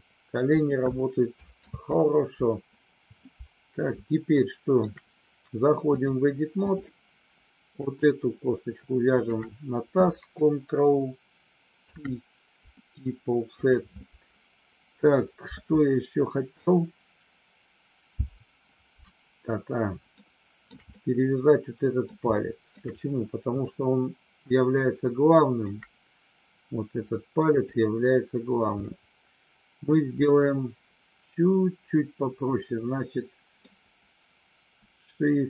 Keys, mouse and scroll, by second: 0.5 click, 1.6 ctrl+z, 4.4 shift+middle click, 6.0 click, 7.7 click, 9.1 shift+click, 11.7 ctrl+p, 20.1 shift+middle click, 20.9-22.0 middle drag, 22.3 shift+middle click, 23.6-25.6 shift+middle drag, 28.7-33.7 middle drag.